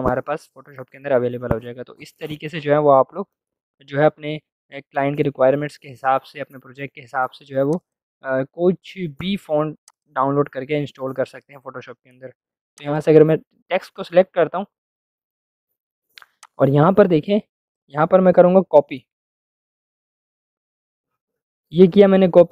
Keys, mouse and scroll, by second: 7.7 click, 12.7 click, 16.3-19.3 drag, 19.3 ctrl+v.